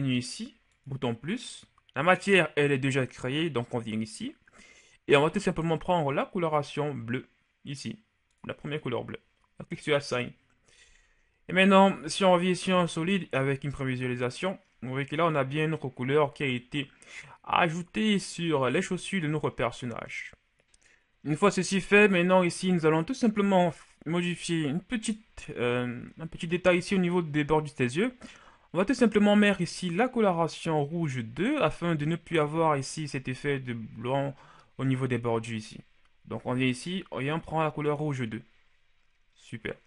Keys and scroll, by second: 11.1 Tab, 12.4 shift+z, 13.5 a.